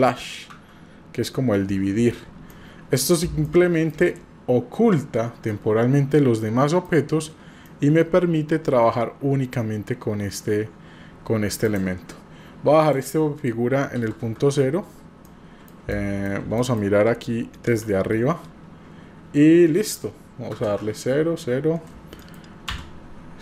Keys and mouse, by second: 0.5 KP_Divide, 2.5-3.1 middle drag, 3.4-3.9 shift+middle drag, 5.5-6.9 middle drag, 7.6 middle click, 13.0-15.3 drag, 15.3-15.7 middle drag, 15.9-16.2 shift+middle drag, 16.6 middle click, 17.6 KP_7, 20.0 click, 22.1 middle click, 22.7 Tab.